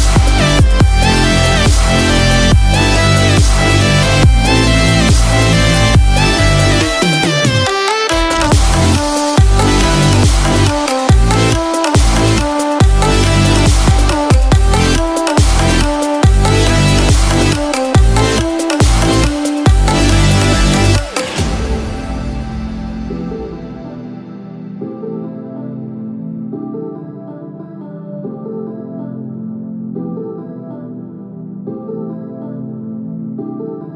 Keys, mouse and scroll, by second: 0.3-0.6 scroll up 1, 0.6 scroll down 2, 0.6-1.1 scroll down 2, 1.1 middle click, 1.7-3.1 scroll up 6, 2.1 middle click, 3.1 shift+middle click, 4.3 middle click, 8.7 click, 9.9 ctrl+z, 14.0-14.5 scroll down 1, 14.5 middle click, 15.4-15.9 scroll down 1, 16.2 shift+middle click, 16.2-17.1 scroll down 2, 17.1 middle click, 18.2 click, 18.9-19.2 scroll up 2, 19.2 middle click, 20.9 KP_7, 22.0 shift+middle click, 23.5-23.9 scroll up 1, 25.1 click.